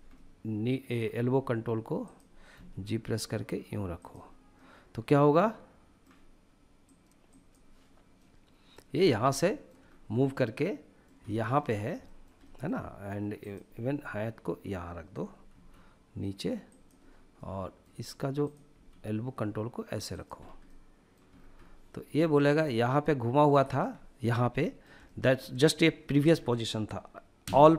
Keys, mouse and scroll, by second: 0.9 r, 1.8 click, 2.3 g, 3.8 click, 4.3-6.7 middle drag, 7.5-8.3 middle drag, 8.3 scroll up 1, 8.8-9.2 shift+middle drag, 8.8 scroll up 2, 9.2 scroll down 1, 9.5-10.4 middle drag, 10.6 shift+middle drag, 11.0 middle click, 11.4 shift+middle click, 11.8-12.5 middle drag, 12.7-13.7 drag, 14.9 g, 16.0 click, 16.7-17.8 middle drag, 17.8 click, 18.1 g, 19.5 click, 19.7 scroll down 1, 20.0-20.7 middle drag, 20.7-21.3 scroll down 3, 21.6 shift+middle click, 22.1-23.8 middle drag, 23.9-24.8 middle drag, 25.0-25.6 shift+middle drag, 25.7-26.1 shift+middle drag, 26.8 a.